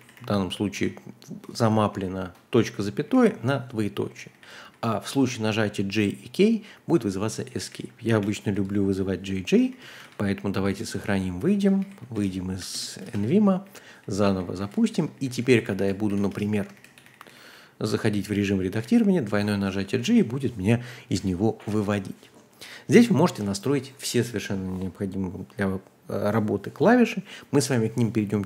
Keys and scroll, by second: 0.0-0.7 typing, 1.9-5.1 typing, 7.3-10.5 typing, 10.7 Return, 11.5-21.6 typing.